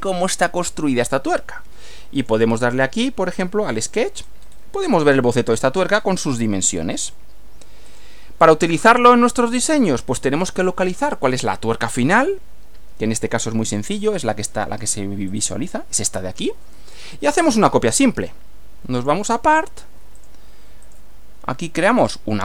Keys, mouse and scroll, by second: 2.2 click, 4.2-4.7 scroll up 1, 7.9 click, 9.0-9.7 middle drag, 9.7 scroll down 1, 11.3-12.1 middle drag, 15.3 click, 17.9 click, 19.0 click, 20.2 click, 20.9 click, 22.0 click.